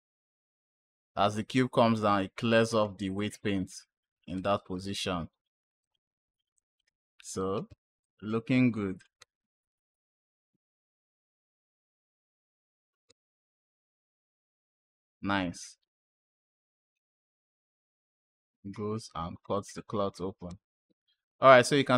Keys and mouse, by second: 2.3 space, 4.2 space, 5.7-6.6 drag, 7.9 click, 9.1 space, 11.3 click, 12.9 space, 13.8 click, 17.1 space, 20.3 space, 20.7 click.